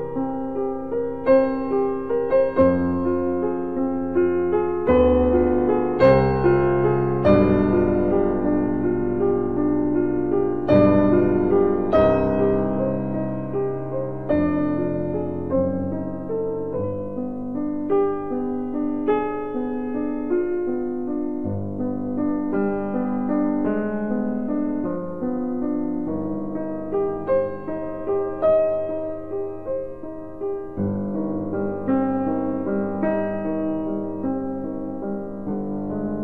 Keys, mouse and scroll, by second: 0.5 click, 13.5 click, 14.0 click, 18.2 click, 18.6 ctrl+r.